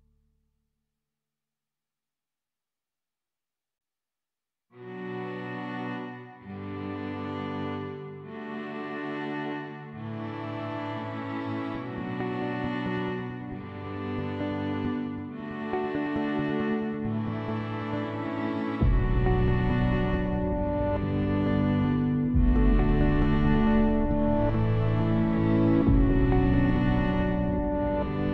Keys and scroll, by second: 11.5 ctrl+s, 15.2 ctrl+s, 19.8 space, 20.5 shift+b, 20.7 a, 21.8 p, 22.4 Return.